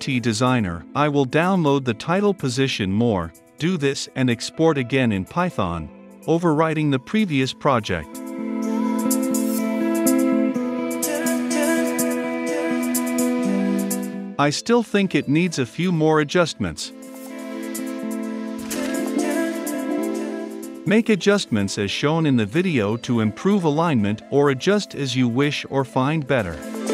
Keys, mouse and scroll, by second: 1.5-3.0 middle drag, 3.0-13.2 drag, 13.4 ctrl+F5, 15.8-17.7 drag, 17.9 click, 18.1 Return, 18.5 click, 18.7 click, 19.4 click, 20.1 click, 20.6 click, 21.1 ctrl+s, 21.8-26.9 right drag.